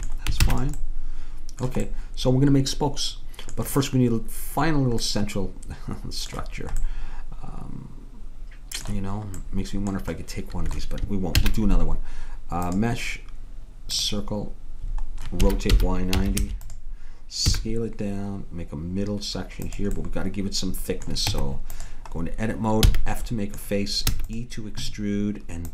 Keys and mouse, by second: 0.5 ctrl+s, 9.8-11.4 middle drag, 11.4 shift+a, 15.5 r, 17.5 s, 20.0-21.3 middle drag, 21.3 Tab, 22.9 f, 24.1 e, 24.2 middle click.